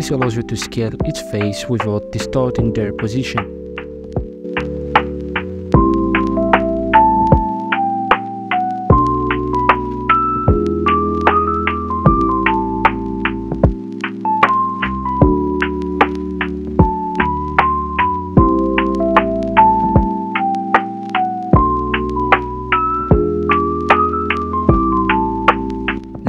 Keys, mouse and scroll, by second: 1.1-2.6 middle drag, 2.6 right click, 3.3 Tab, 3.5 alt+right click, 4.2 ctrl+shift+e, 9.1 middle click, 9.7 s, 10.7 middle click, 11.1 Tab, 11.5-12.0 scroll down 4, 12.0-13.4 middle drag, 13.4 right click, 13.7 KP_1, 14.4 e, 16.1 e, 17.6 s, 19.2 g, 20.2 middle drag, 20.5 right click, 20.8-21.7 middle drag, 21.7 e, 22.9 e, 24.0 Tab, 24.4-24.8 scroll down 4, 24.8-25.8 middle drag, 25.8-26.2 drag.